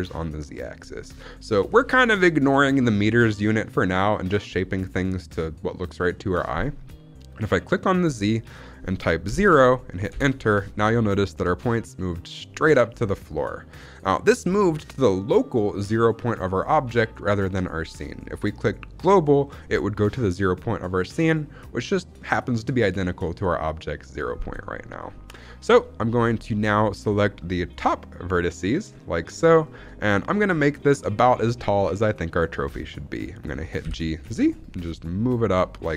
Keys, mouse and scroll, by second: 7.9-10.4 drag, 25.7 shift+middle click, 26.3-27.0 scroll down 1, 27.6 click, 29.5 shift+middle click, 30.3 scroll down 1, 30.6 shift+middle click, 31.0-32.4 scroll down 1, 33.7 g, 34.1 z.